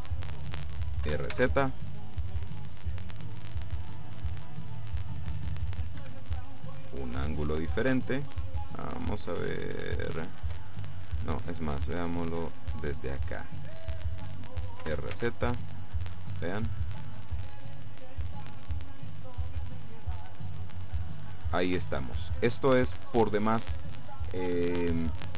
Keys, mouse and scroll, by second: 1.1 r, 1.4 z, 6.1 Escape, 6.5 click, 7.3-8.7 middle drag, 8.7-9.3 scroll up 1, 9.3 middle click, 10.5-12.1 drag, 12.5 middle click, 14.9 r, 15.2 z, 22.9 Escape, 23.7-24.2 scroll down 2, 24.5-25.3 middle drag.